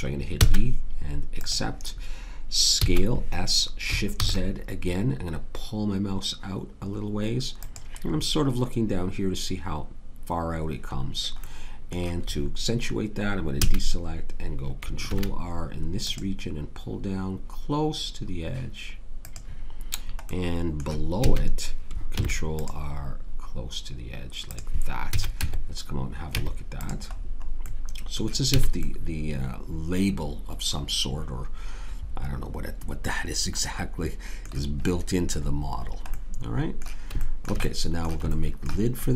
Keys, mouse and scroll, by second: 0.4 shift+e, 2.8 s, 8.2-11.4 middle drag, 11.4-13.6 drag, 13.6 a, 15.1 ctrl+r, 21.2 a, 22.1 ctrl+r, 25.1 a, 25.4 Tab, 26.3 Tab, 28.6 a, 30.8-32.4 middle drag.